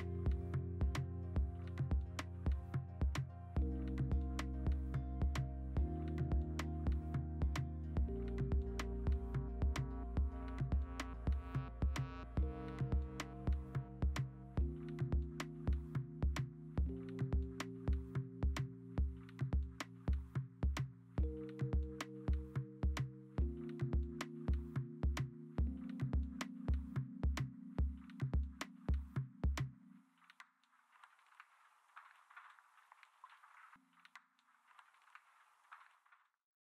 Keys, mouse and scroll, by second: 1.5 click.